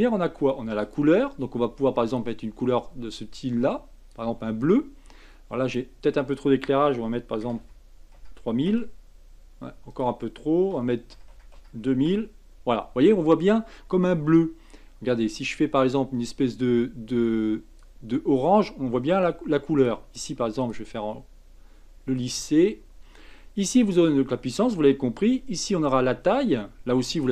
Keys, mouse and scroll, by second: 0.8 click, 5.7-7.6 drag, 7.6 KP_0, 9.9-11.3 drag, 11.3 KP_0, 15.3-16.2 drag, 19.8 click, 20.1-22.2 right drag, 22.2 click, 25.5-27.3 drag.